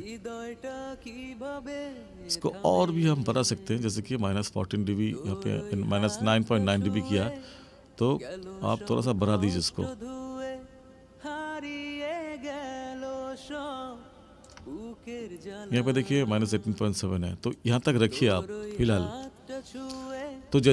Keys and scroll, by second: 20.4 space.